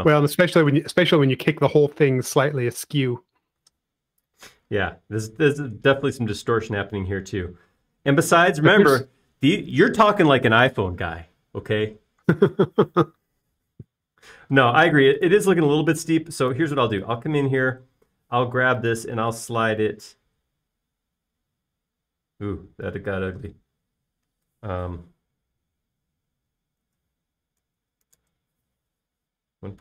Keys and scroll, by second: 19.3 m, 28.0-29.0 typing, 29.1 Return.